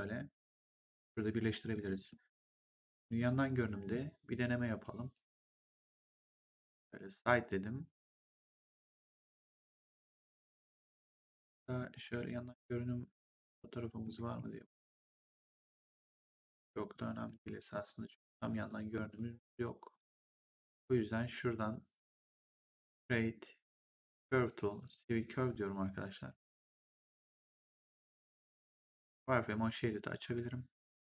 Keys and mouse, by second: 2.0 middle click, 3.4 click, 5.0 right click, 6.7 click, 12.1 middle click, 15.4 middle click, 16.9 middle click, 19.9 click, 22.2 click, 24.8 click, 29.7 click.